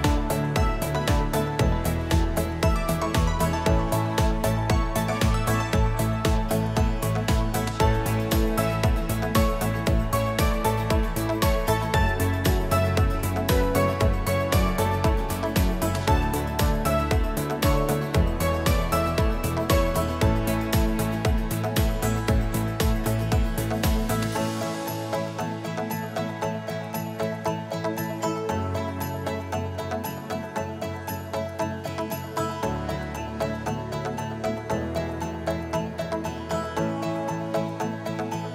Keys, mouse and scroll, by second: 0.6 click, 1.0 F1, 1.9 click, 2.5 click, 3.6 click, 5.9 click, 6.5 click, 7.3-8.3 =, 8.7 click, 10.3 click, 10.9 click, 12.1 click, 12.7 click, 13.5 click, 13.9 click, 15.3 click, 17.8 click, 18.5 ctrl+shift+c, 18.9 F2, 21.2 click, 24.0 click, 26.1 click, 26.6 =, 26.8 click, 26.8 =, 27.4 click, 27.4 =, 27.5 click, 27.8-30.2 drag, 30.7 click, 32.3 click, 34.9 click, 36.0 click, 36.3 scroll, 38.4 click.